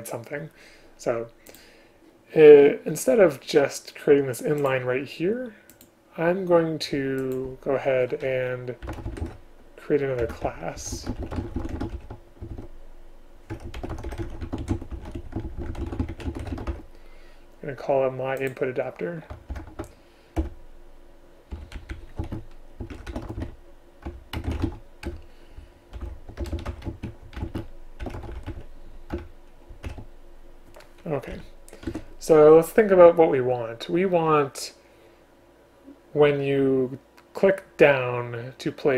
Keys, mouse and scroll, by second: 7.3 shift+click, 10.3 Return, 19.6 alt+Return, 20.5 Return, 21.7 End, 21.9 Left, 22.3 space, 24.2 Return, 24.5 space, 25.2 Return, 26.5 BackSpace, 27.0 space, 27.5 shift+space, 29.2 Return, 32.0 Tab.